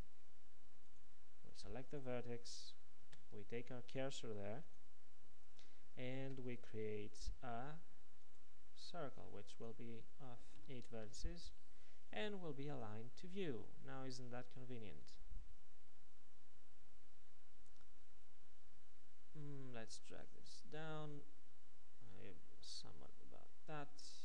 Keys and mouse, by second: 2.0-4.8 drag, 3.1 shift+s, 6.3 shift+a, 18.1 s.